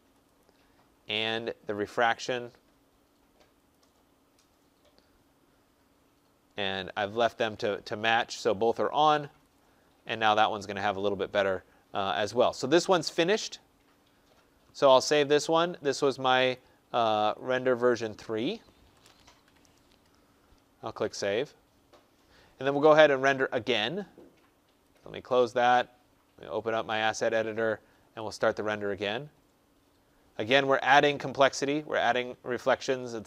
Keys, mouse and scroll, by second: 0.1 click, 3.6 click, 4.2-5.2 scroll, 9.5 click, 15.0 click, 16.4 click, 17.4 click, 17.9 click, 18.8 BackSpace, 19.3 BackSpace, 21.1 click, 24.9 click, 26.8 click, 28.2 click.